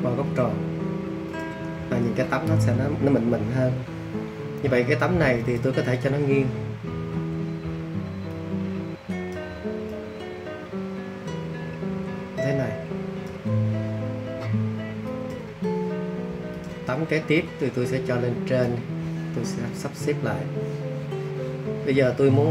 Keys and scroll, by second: 7.1 super+t.